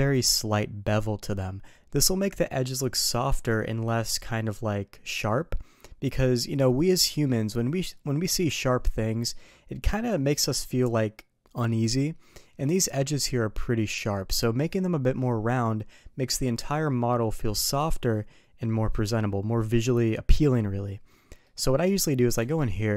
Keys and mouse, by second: 6.6 middle drag, 7.1 Tab, 7.7 middle click, 8.4 KP_3, 12.7 shift+middle click, 21.4-21.9 middle drag, 22.4 Tab.